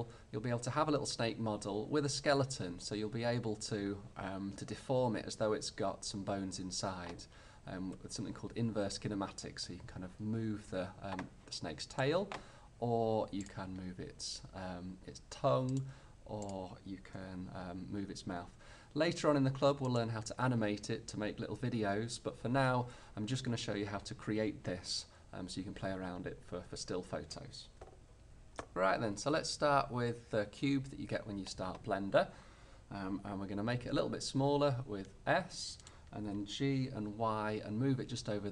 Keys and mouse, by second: 13.8 g, 15.9-18.4 drag, 16.5-17.6 right drag, 17.2 r, 20.1-22.0 drag, 34.5 s, 36.3-38.0 drag, 36.3 g.